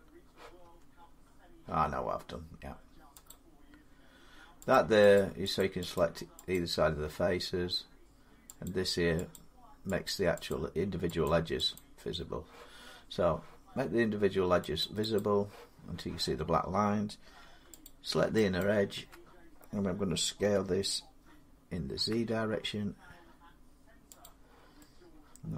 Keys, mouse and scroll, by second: 0.4 Tab, 3.1 click, 4.5 click, 5.0 click, 5.4 click, 5.8 click, 6.4 click, 8.5 click, 9.2 click, 9.9 click, 10.3 click, 11.1 click, 11.6 click, 14.6 click, 15.0 click, 17.7 click, 18.4 alt+click, 20.2 s, 21.8 z, 24.0 click.